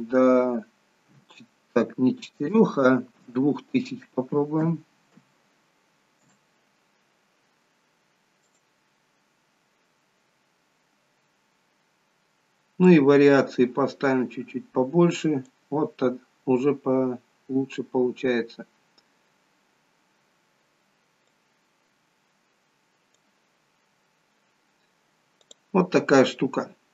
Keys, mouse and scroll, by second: 8.5 click, 9.3-11.4 scroll up 1, 11.4-12.5 scroll up 4, 13.0 click, 21.4 click, 25.5 click, 26.7-26.9 scroll down 3.